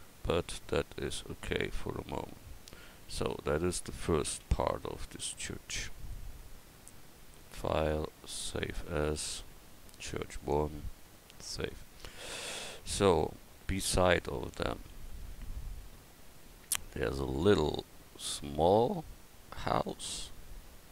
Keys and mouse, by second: 4.4 Tab, 13.8 KP_1.